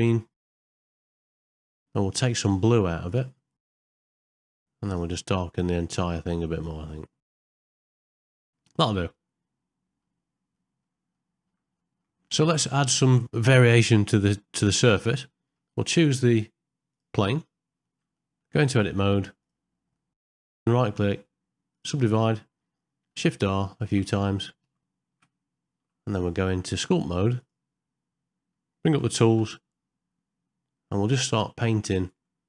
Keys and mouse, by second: 0.4 click, 0.7 click, 1.0 click, 1.3 click, 1.6 click, 3.0 click, 3.7 click, 3.9 click, 4.2 click, 4.4 click, 4.8 click, 6.7 click, 7.5 click, 7.7 click, 7.9 click, 8.1 click, 8.4 ctrl+middle click, 8.7-10.0 middle drag, 10.5 middle click, 11.1 ctrl+middle click, 11.8 shift+middle click, 12.2 ctrl+middle click, 12.7 middle click, 14.7 middle click, 15.3 ctrl+middle click, 16.9 click, 17.9 ctrl+middle click, 18.1 shift+middle click, 18.8 Tab, 19.9 middle click, 20.5-21.8 right drag, 23.1-25.2 shift+r, 25.8 Tab, 26.6 Tab, 29.7 t, 31.1 middle click.